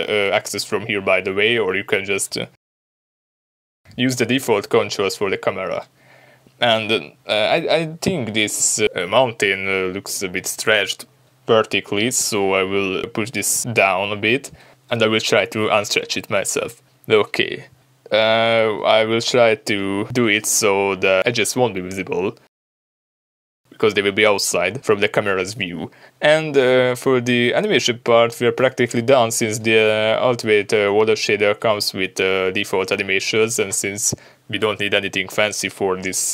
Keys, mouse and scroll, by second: 7.6-10.4 drag, 10.6-15.9 shift+middle drag, 11.0-11.4 scroll up 2, 11.6 scroll down 1, 12.3 s, 15.9 click, 16.1 scroll down 1, 16.6 scroll up 1, 17.1 s, 18.0 g, 18.6 click, 18.7 s, 19.9 click, 20.4 s, 22.0 click, 22.2 scroll down 1, 23.2 scroll up 1, 29.4 click, 30.5-31.9 middle drag, 31.9 click, 35.9 scroll down 2.